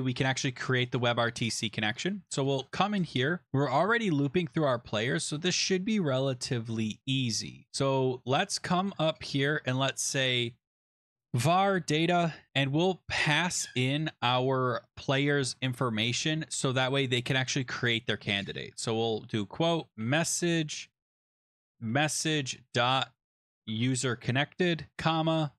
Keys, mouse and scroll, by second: 0.3 click, 2.4 Return, 2.6 Return, 4.8-5.1 scroll down 3, 7.1 scroll, 7.7 click, 8.5 Return, 8.7 Return, 8.9 Return, 10.8-12.9 typing, 14.4 shift+Right, 14.8 shift+Right, 14.9 shift+Right, 15.2-16.0 typing, 16.0 Up, 16.6 Escape, 16.8 Down, 18.6-25.5 typing, 20.6 Right.